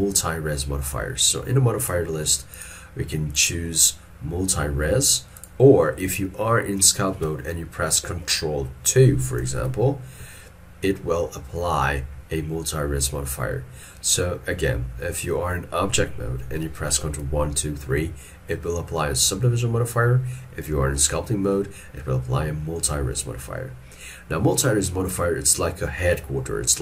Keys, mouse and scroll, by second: 9.5 ctrl+2.